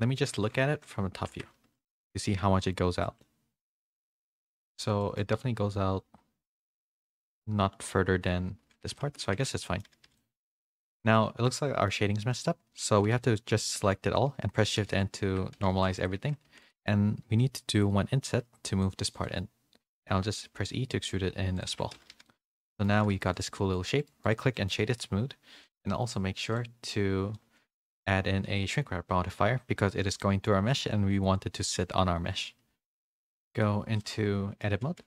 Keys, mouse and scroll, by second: 0.6 KP_7, 1.3 Tab, 1.6 z, 2.0 a, 3.0 shift+middle click, 5.0 shift+middle click, 9.1 a, 9.1 z, 9.3 Tab, 9.6 middle click, 9.8 a, 10.0 a, 10.2 middle click, 10.7 click, 10.9 Tab, 11.1 middle click, 11.6 middle click, 12.3 a, 14.8 shift+n, 15.2 Tab, 15.6 a, 16.2 Tab, 16.2 a, 16.4 3, 17.7 i, 20.2 e, 21.7 Tab, 21.9 a, 22.2 a, 22.2 middle click, 22.9 a, 23.1 a, 23.5 middle click, 24.5 middle click, 26.5 click, 27.3-29.3 middle drag, 33.6-34.6 middle drag.